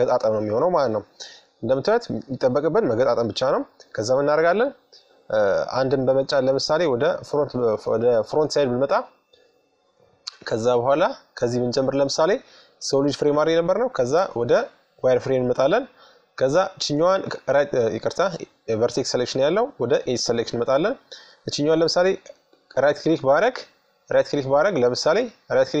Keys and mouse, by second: 3.7 KP_1, 5.7-7.4 middle drag, 8.1 middle click, 9.4 middle click, 9.9-11.5 middle drag, 12.6-14.3 drag, 15.8-17.7 right drag, 18.0-20.8 drag, 21.0-23.0 right drag, 23.2-25.1 right drag.